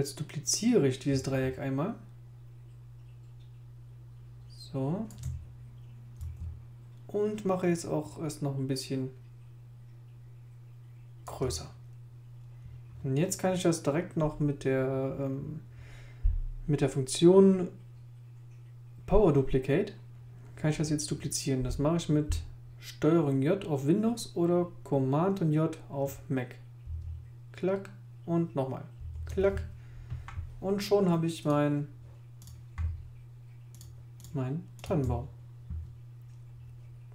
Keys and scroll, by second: 26.8 super+j, 29.0 super+j.